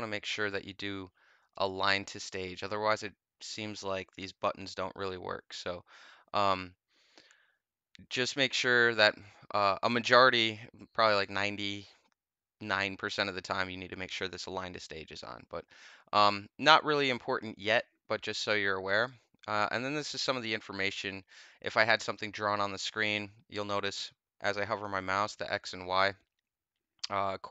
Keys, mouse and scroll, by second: 1.4 click, 18.9 click.